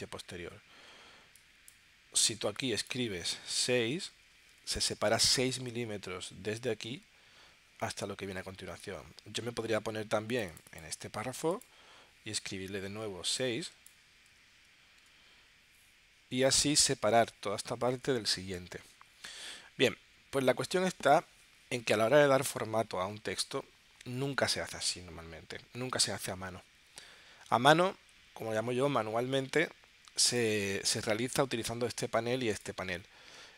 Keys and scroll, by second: 3.6 6, 14.3 6, 15.0 Tab.